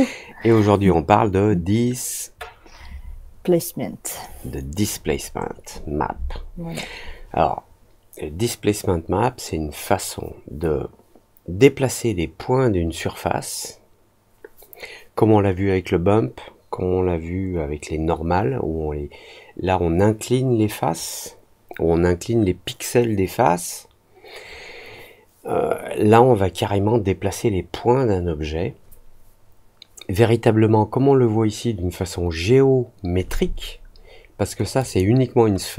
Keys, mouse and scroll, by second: 34.7 click.